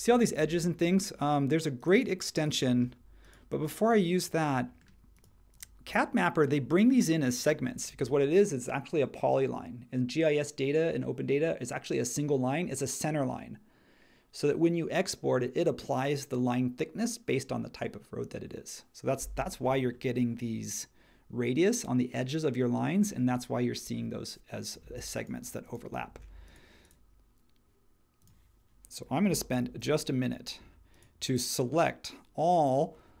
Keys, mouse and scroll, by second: 29.5 super+g.